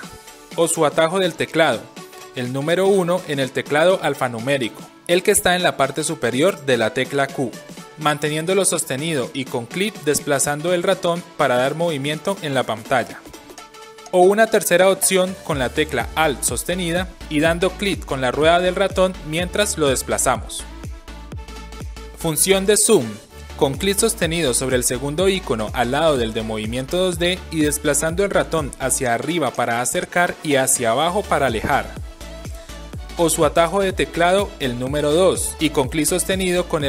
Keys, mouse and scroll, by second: 1.2 1, 9.1-13.5 drag, 9.1 1, 17.5-18.0 alt+right drag, 18.0-21.5 alt+middle drag, 21.5 alt+right click, 25.5-32.4 drag, 34.4 2, 35.0 right drag, 35.0 2, 35.1-36.8 drag.